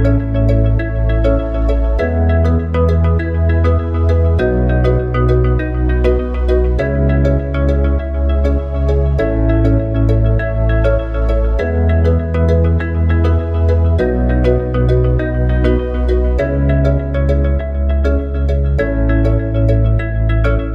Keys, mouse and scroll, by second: 2.6 click, 3.8 click, 6.5 click, 7.5 click, 12.9 click, 13.9 shift+click, 14.9 click, 15.8 click, 16.6 click, 20.0 e.